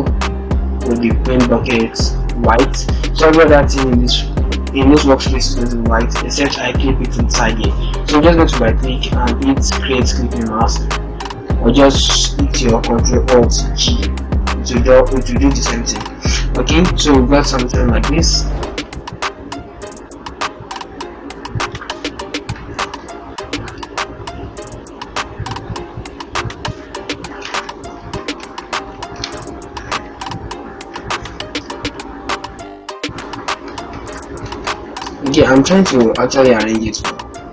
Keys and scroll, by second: 13.1 ctrl+alt+g, 15.7 0, 16.5 ctrl+-, 29.4 ctrl+shift+-, 29.7 ctrl+shift+0, 30.7 ctrl+-, 31.5 z, 32.7 ctrl+z, 33.8 ctrl+shift+z, 35.0 shift+Left, 36.2 Left.